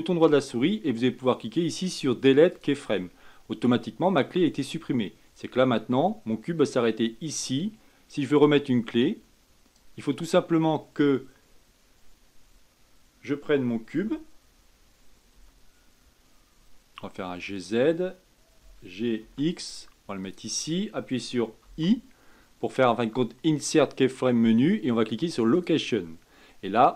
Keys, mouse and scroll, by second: 5.6-8.6 drag.